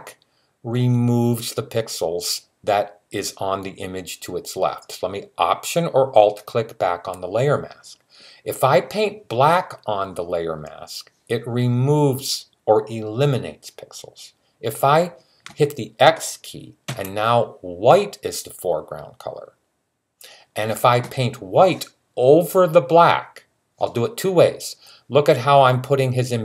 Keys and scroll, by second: 16.6 x.